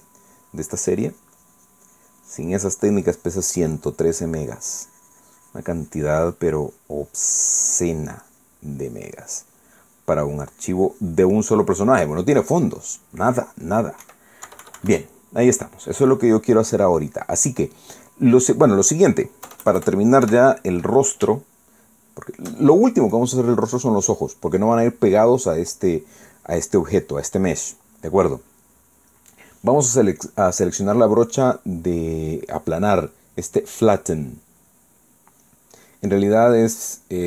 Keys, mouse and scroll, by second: 2.1-12.5 drag, 12.6-14.2 middle drag, 15.0 KP_1, 15.4 KP_Subtract, 16.1-17.4 middle drag, 17.7-18.9 drag, 19.7 click, 20.4 KP_Add, 21.2 KP_1, 22.3-23.5 shift+drag, 24.1 click, 24.7 click, 31.2 click, 35.3 click.